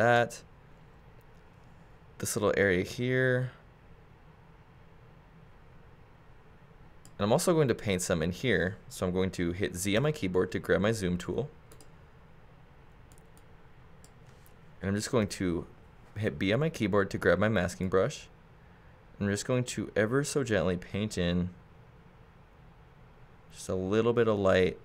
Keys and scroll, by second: 0.6 super+z, 10.0 z, 15.2 b.